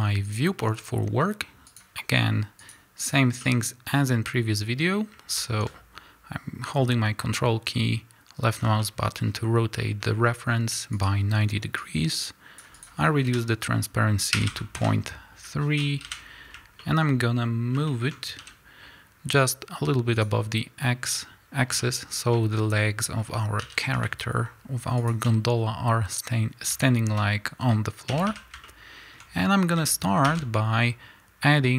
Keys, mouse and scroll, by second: 0.2 click, 0.6-1.7 middle drag, 1.7 click, 2.6-3.2 drag, 3.4 middle click, 4.3-8.8 drag, 8.8-10.9 middle drag, 10.9 click, 11.8-16.8 drag, 14.8 KP_Enter, 16.0 KP_1, 16.8-20.2 shift+middle drag, 17.0 scroll up 2, 18.4 g, 20.2 click, 21.8-25.1 shift+middle drag, 23.6 g, 25.1 shift+click, 25.5-26.3 scroll down 1, 26.8-31.7 shift+middle drag, 28.1 a, 30.3 shift+a.